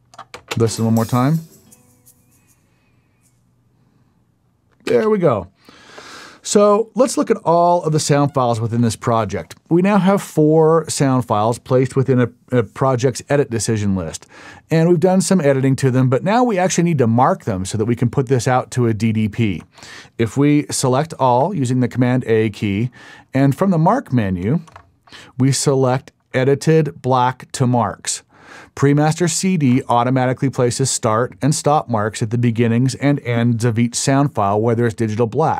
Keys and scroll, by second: 0.3 space, 4.9 space, 8.2 super+e, 20.9 super+a.